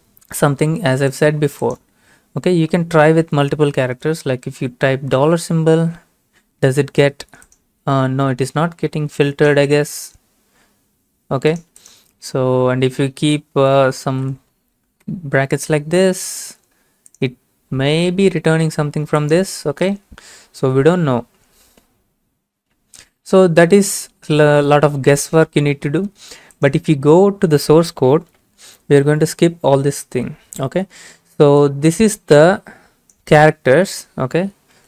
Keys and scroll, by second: 4.5 typing, 5.2 Return, 13.9-14.7 typing, 15.0 Return.